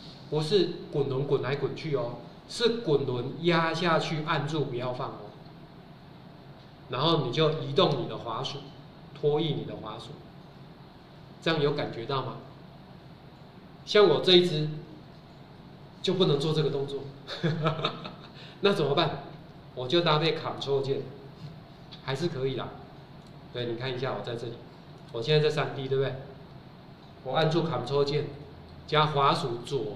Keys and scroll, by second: 22.1 Escape.